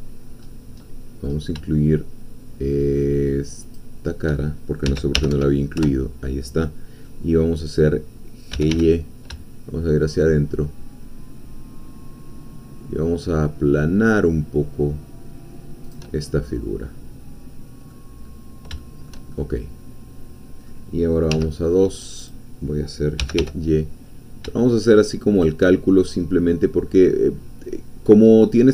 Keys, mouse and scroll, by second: 0.0 middle click, 0.8 middle click, 3.6 shift+click, 4.8 s, 5.1 y, 5.3 0, 5.8 Return, 7.0-8.5 middle drag, 8.5 g, 8.8 y, 15.8 shift+click, 16.2 shift+scroll down 1, 16.4-18.2 shift+middle drag, 18.2-18.5 scroll up 1, 18.8-20.8 shift+middle drag, 21.4 2, 22.2 click, 23.2 g, 23.4 y, 25.4 shift+click, 26.4 scroll down 2, 27.0-28.4 middle drag.